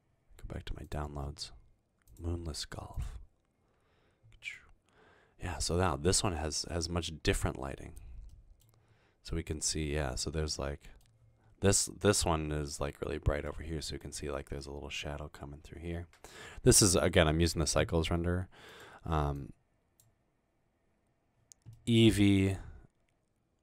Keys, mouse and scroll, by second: 4.6 scroll up 1, 5.2 scroll up 1, 5.5 middle click, 5.9 scroll down 1, 6.5 middle click, 6.9-7.9 middle drag, 18.8 click, 19.5 click, 21.9-23.6 middle drag.